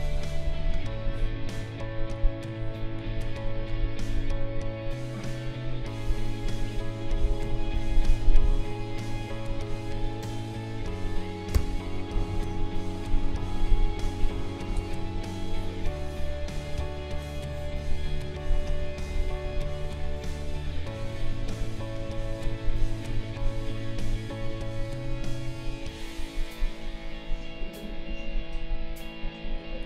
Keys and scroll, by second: 11.5 b.